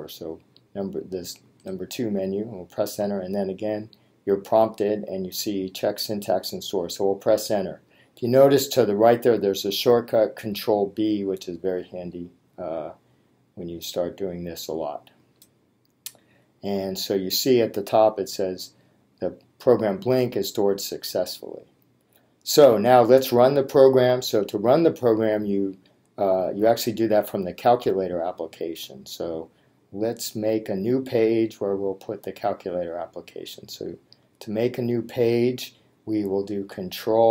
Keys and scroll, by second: 1.6 Return.